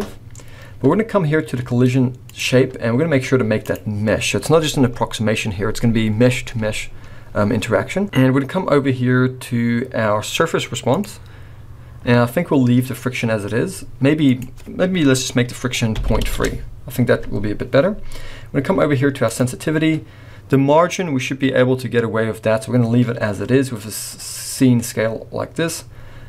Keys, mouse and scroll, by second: 2.3 click, 4.9-8.0 scroll up 3, 10.9 click, 14.3 click, 18.4-19.2 scroll down 1, 19.2 click, 19.6-20.2 scroll down 2.